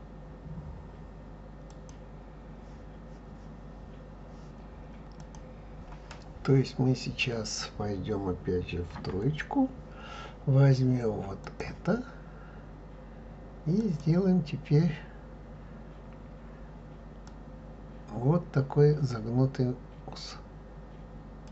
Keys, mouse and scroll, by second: 8.9 KP_3, 11.4 click.